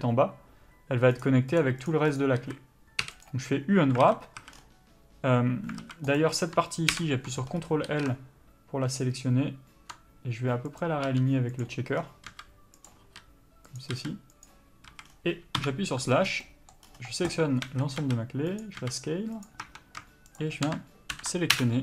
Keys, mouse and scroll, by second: 1.4 click, 2.7 a, 3.6 u, 4.4 alt+a, 6.1 alt+a, 6.5 click, 7.2 ctrl+l, 8.2 r, 11.4 g, 11.9 click, 12.6 s, 13.4 r, 14.3 s, 15.2 a, 15.4 scroll down 1, 15.9 KP_Divide, 16.6 scroll down 1, 16.8 middle click, 17.1 scroll up 1, 17.9 a, 18.3 s, 19.9 Tab, 20.7 shift+click.